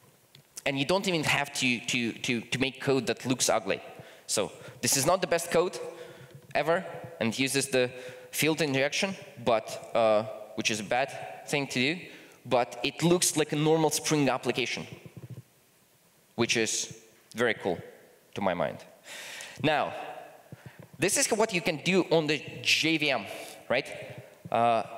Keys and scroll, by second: 18.4 super+F2.